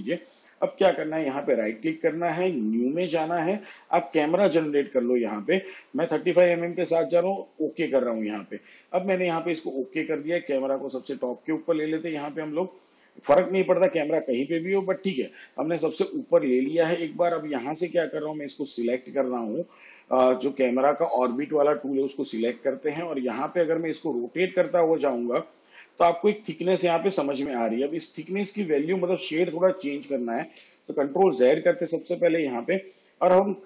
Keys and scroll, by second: 30.5 ctrl+z.